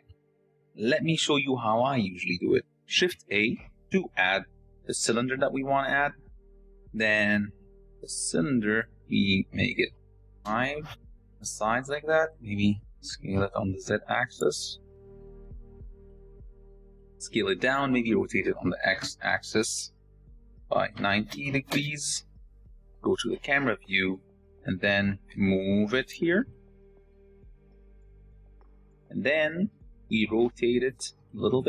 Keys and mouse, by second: 4.0 shift+a, 9.3-11.1 drag, 12.1 click, 13.4 s, 15.1 s, 15.8-16.3 drag, 16.7 s, 18.1 r, 22.6 KP_0, 25.7 g, 26.4 s, 27.3 s, 28.0 shift+middle click, 28.2 click, 28.8 shift+click, 29.2-31.6 typing.